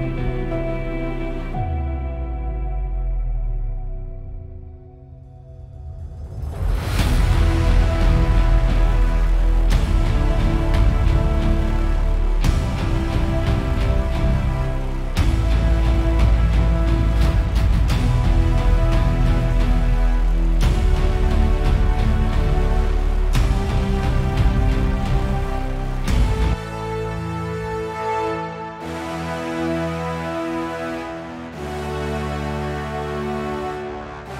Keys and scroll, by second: 3.6 F8, 6.7 super+], 6.8 super+], 12.6 F7, 15.7 super+[, 16.7 super+=.